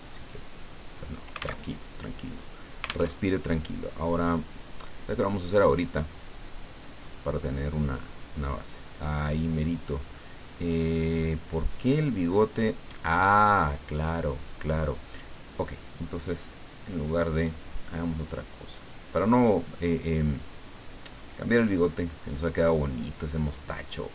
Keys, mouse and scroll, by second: 1.6 alt+Tab, 3.1 alt+Tab, 5.4 click, 6.2 click, 7.7 click, 9.6 click, 16.9 click, 18.7 click, 20.1-23.5 drag.